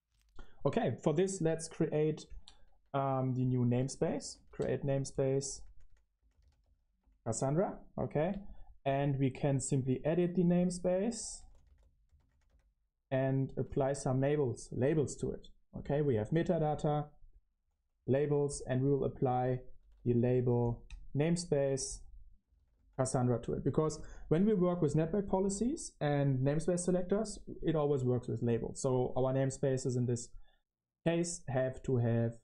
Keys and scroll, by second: 1.4 ctrl+l, 1.9-7.2 typing, 7.2 Return, 10.7-12.7 typing, 13.5 Return, 14.3-20.7 typing, 22.1-25.9 typing, 27.5 Return.